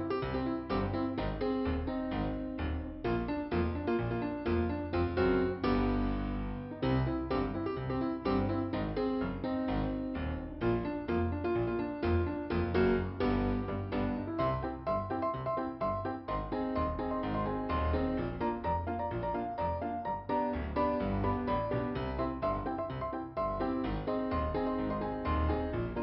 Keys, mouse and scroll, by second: 0.5 click, 7.2 click, 8.0 click, 9.9 click, 11.3 click, 11.5 click, 21.7 click, 22.3 click, 22.6 right click, 23.3 click, 24.8 click.